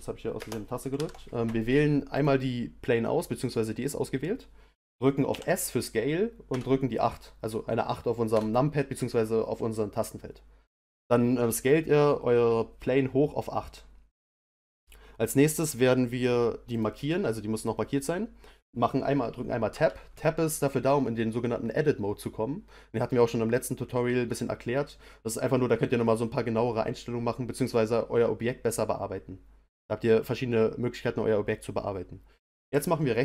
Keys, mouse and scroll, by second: 0.4 space, 0.9 shift+Left, 2.1 click, 5.3 s, 16.7 click, 32.6-33.2 right drag.